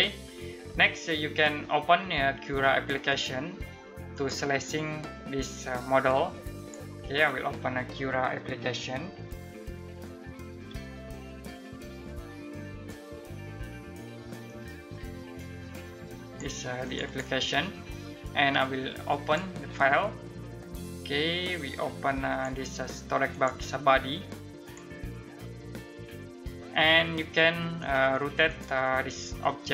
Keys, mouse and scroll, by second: 6.3 click, 14.9 click, 26.1 middle click, 28.0 click.